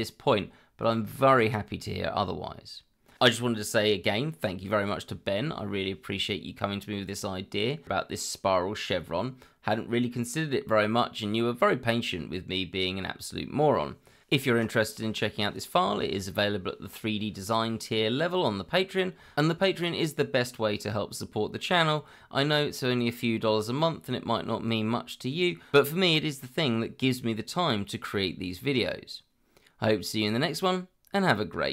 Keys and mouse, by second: 31.3-31.7 middle drag.